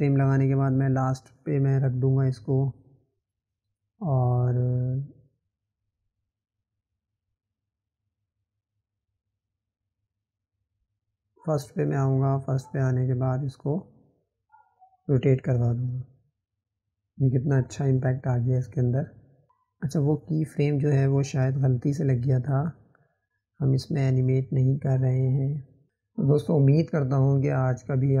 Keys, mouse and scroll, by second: 5.3 click, 9.2-10.7 right drag, 10.7 click, 13.4 click.